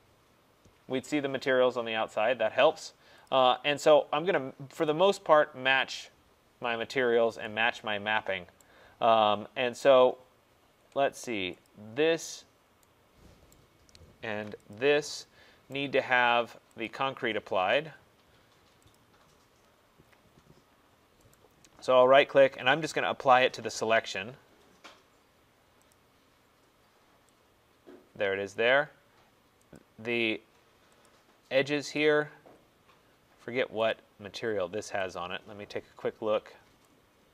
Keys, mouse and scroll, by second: 1.1 middle click, 1.2 middle click, 1.7 middle click, 2.6 middle click, 3.4 click, 4.9 click, 8.6 right click, 11.7 click, 13.6 right click, 14.8 shift+click, 15.8 right click, 16.9 click, 19.0 click, 19.8 middle click, 20.0 middle click, 20.8 middle click, 21.4 right click, 23.8 click, 26.0 click, 28.6 click, 29.9 click, 31.2 shift+click, 32.1 click, 34.0 click, 35.2 click.